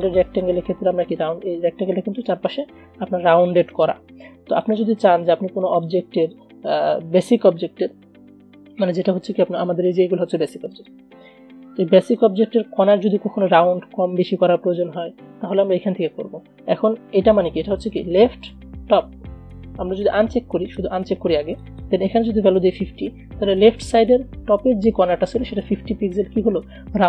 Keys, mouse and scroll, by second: 0.1 click, 3.4 space, 3.8 click, 5.5 v, 5.8 click, 10.9 right click, 12.3 click, 20.8 click.